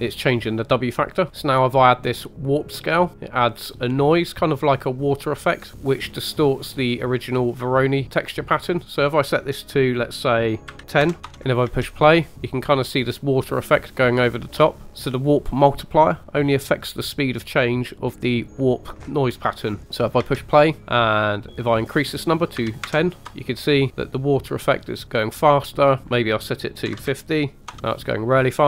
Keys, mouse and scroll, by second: 1.3 scroll down 3, 2.6 click, 5.2-8.8 drag, 8.8-11.3 drag, 11.3-11.7 scroll down 2, 11.7 space, 12.3 scroll up 2, 14.9 click, 20.3 space, 21.5 click, 23.7 scroll down 2, 26.0 click, 27.0 click.